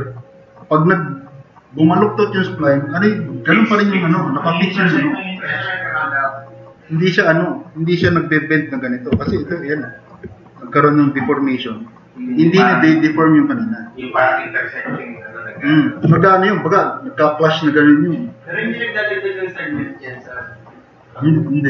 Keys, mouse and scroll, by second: 9.5 middle drag, 9.9 middle click.